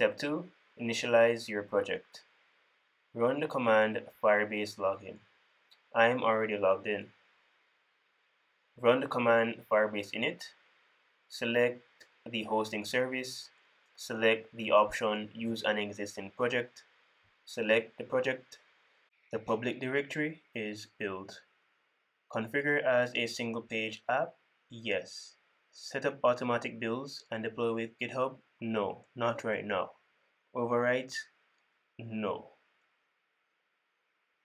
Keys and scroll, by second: 5.0 super+v, 11.1 super+v.